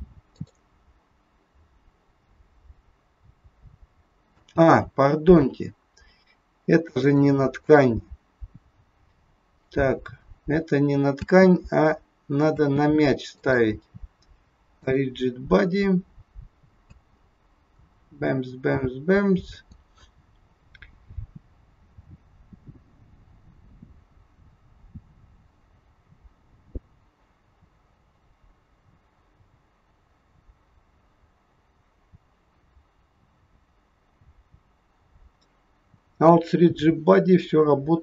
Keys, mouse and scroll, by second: 0.6 click, 4.3 space, 7.0 click, 7.6 click, 11.1 space, 12.6 space, 13.3 click, 14.7 click, 16.8 space.